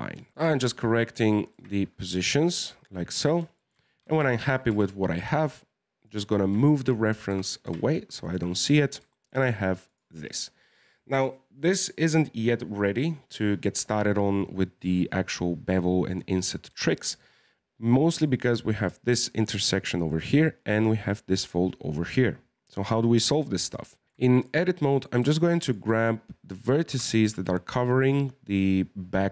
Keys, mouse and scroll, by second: 0.2 e, 0.3 right click, 0.4 g, 1.8 middle click, 1.8-2.1 scroll down 4, 2.1 scroll up 1, 3.2 scroll down 3, 4.2 shift+middle click, 4.7 Tab, 5.0 scroll up 1, 6.4 scroll down 4, 6.7 shift+middle click, 7.3 g, 8.5-9.1 scroll up 10, 9.1-9.9 shift+middle drag, 9.9 right click, 14.9-16.8 scroll up 4, 16.8-19.8 shift+middle drag, 23.4-24.0 shift+middle drag, 24.0 scroll down 1, 24.2 shift+middle click, 24.9 right click, 25.6 shift+right click, 26.9 g.